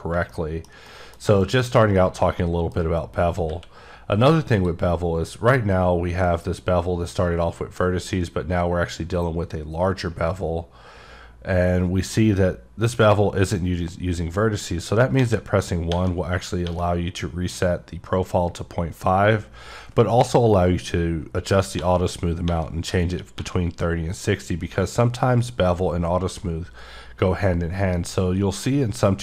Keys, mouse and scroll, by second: 0.3 scroll down 1, 0.3 middle click, 0.9 middle click, 1.4 middle click, 2.2 middle click, 4.5 click, 8.1 scroll up 1, 8.7-9.5 scroll up 5, 10.5-11.0 scroll up 2.